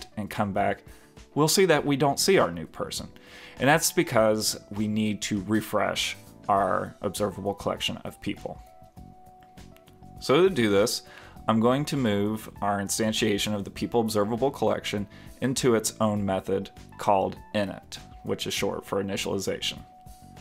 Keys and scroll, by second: 17.9 shift+super+Left, 18.6 alt+Return, 19.3 alt+Return.